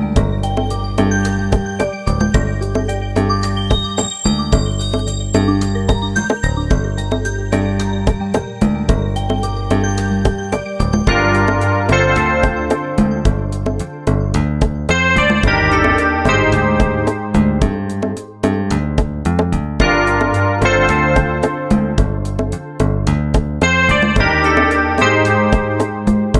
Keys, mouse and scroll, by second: 0.2 ctrl+z, 0.6 right click, 0.8 click, 1.3 Escape, 1.5 ctrl+z, 1.7 g, 3.5 right click, 3.7 click, 4.3 right click, 4.4 click, 4.8 right click, 5.0 click, 5.6 right click, 6.3 click, 6.3 right click, 6.6 right click, 6.9 click, 7.6 right click, 8.3 right click, 9.8 right click, 10.0 click, 10.4 right click, 10.6 click, 11.0 right click, 11.4 click, 11.6 right click, 12.0 right click, 12.3 click, 12.7 right click, 12.8 click, 13.9 right click, 14.0 click, 14.6 right click, 14.7 click, 15.2 right click, 15.3 click, 16.5 right click, 16.6 click, 17.0 right click, 17.1 click, 17.4 click, 18.1 click, 18.2 right click, 18.8 click, 18.9 right click, 19.1 click, 19.1 right click, 19.3 right click, 19.4 click, 19.8 right click, 20.1 click, 20.6 right click, 20.9 click, 21.6 right click, 22.2-24.5 typing, 22.6 right click, 22.8 click, 24.5 middle click, 24.8 click, 26.2 middle click.